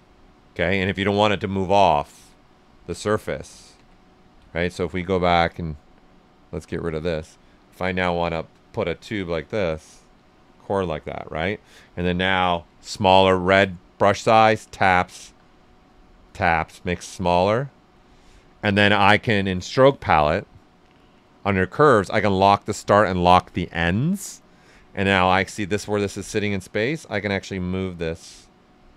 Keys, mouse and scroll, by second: 1.5 ctrl+z, 5.4 click, 7.6 s, 7.7 click, 8.7-12.6 drag, 12.6 s, 12.7-14.6 drag, 15.2 s, 15.3 click, 16.9 s, 17.0 click, 24.5-27.3 right drag, 27.3-28.9 drag.